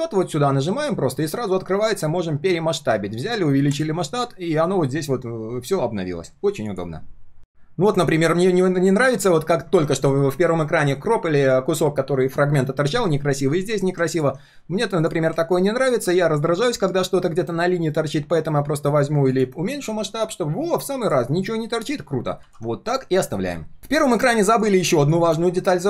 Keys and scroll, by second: 22.4 ctrl+s.